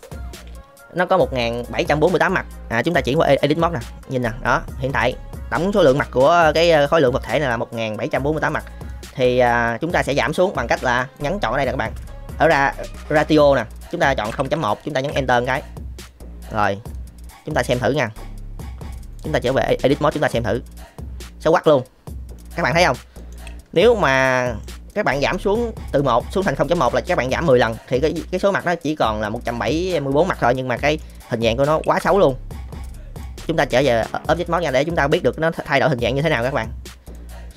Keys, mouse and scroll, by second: 2.9-3.2 drag, 5.8-7.2 middle drag, 8.9 middle click, 9.4 middle click, 11.2-15.0 drag, 16.0 middle click, 16.9 middle click, 18.0 middle click, 19.2 click, 20.3-22.3 middle drag, 23.1 middle click, 23.4 shift+middle drag, 23.9-24.6 middle drag, 24.9 middle click, 30.8 middle click, 31.8 ctrl+z, 33.2-33.8 drag, 34.3-34.8 middle drag, 35.4-36.4 middle drag, 37.0-37.5 drag.